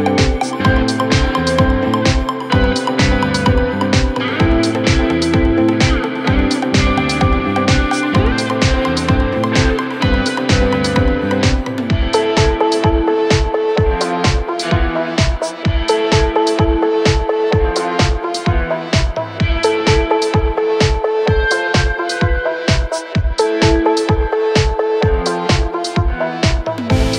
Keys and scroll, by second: 21.0 shift+F2, 21.5 Escape, 22.9 shift+F2, 24.4 shift+F2, 24.9 Escape.